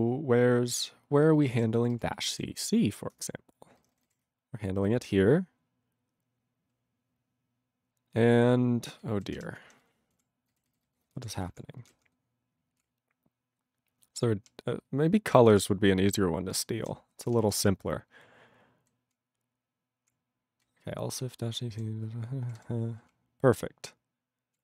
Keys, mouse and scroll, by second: 1.6 ctrl+s, 1.8-3.0 typing, 3.2 Return, 3.8 ctrl+n, 3.9 ctrl+n, 4.1 ctrl+a, 4.2 ctrl+f, 4.7 ctrl+f, 4.8 ctrl+f, 5.4 ctrl+f, 9.0 ctrl+n, 9.4 ctrl+l, 9.6 ctrl+n, 9.8 ctrl+n, 10.2 ctrl+l, 10.5 ctrl+n, 10.7 ctrl+n, 11.0 ctrl+n, 11.2 ctrl+l, 11.4 ctrl+n, 11.5 ctrl+l, 11.8 ctrl+n, 12.0 ctrl+l, 12.8-14.5 ctrl+p, 14.8 ctrl+n, 15.4 ctrl+n, 15.4 ctrl+n, 15.6 ctrl+space, 15.7 ctrl+n, 16.2-16.9 ctrl+n, 17.1 ctrl+p, 17.6 alt+w, 17.8-18.9 ctrl+n, 19.1-20.1 ctrl+p, 20.7-21.8 ctrl+n, 22.5 ctrl+p, 22.6 ctrl+y, 23.1-24.6 ctrl+p.